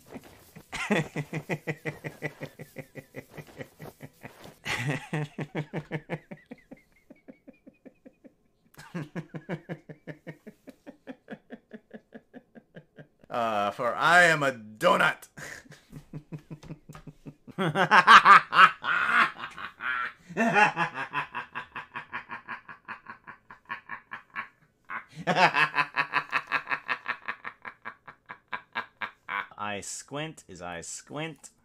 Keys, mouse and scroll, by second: 17.5 space.